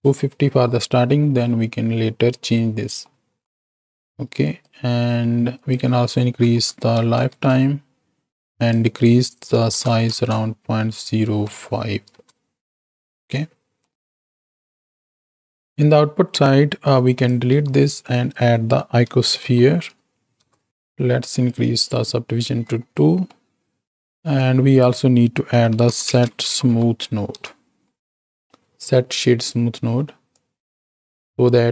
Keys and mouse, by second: 3.1 middle click, 4.3 click, 5.5-7.3 drag, 8.7-12.2 drag, 13.8-14.9 drag, 13.8-14.9 right drag, 15.6 ctrl+z, 17.1 click, 17.5 x, 18.0-20.7 drag, 21.3 click, 23.0 middle click, 24.0 alt+a, 24.3-28.3 drag, 28.4-29.6 drag, 30.4 click, 31.2 click.